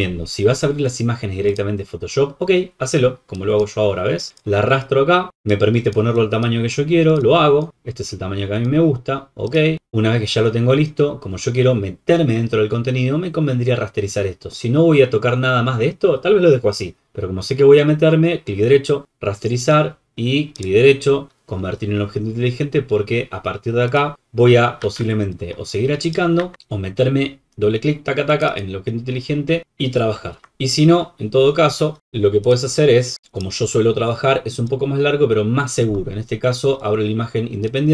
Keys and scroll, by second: 24.8 ctrl+t, 26.3 Escape, 30.3 ctrl+w.